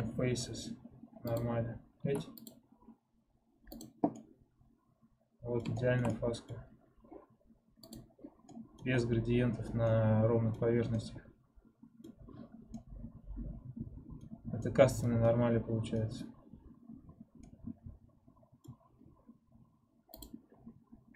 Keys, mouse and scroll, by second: 2.8 ctrl+Tab, 3.9 click, 4.1-6.5 middle drag, 6.5-8.0 scroll up 1, 8.0 click, 8.4 middle click, 8.8-9.5 scroll down 3, 9.8 middle click, 10.5-10.8 scroll up 2, 10.8-12.3 middle drag, 12.3-12.6 scroll down 2, 12.6-16.4 middle drag, 16.4-17.3 scroll up 1, 17.3-20.1 middle drag.